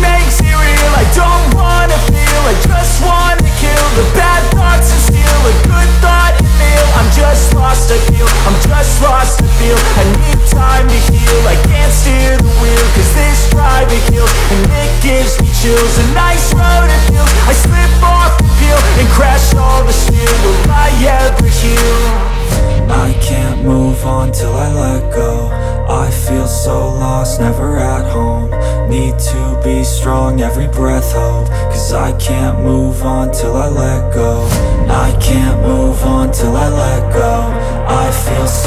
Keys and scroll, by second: 10.4 ctrl+d.